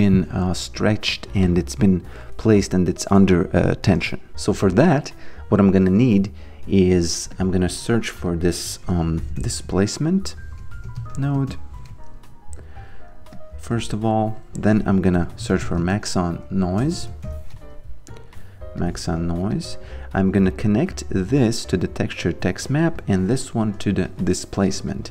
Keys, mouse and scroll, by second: 7.3 click, 8.8-11.6 typing, 12.6 click, 14.9-17.6 typing, 18.1 click, 22.2 click, 24.9 click.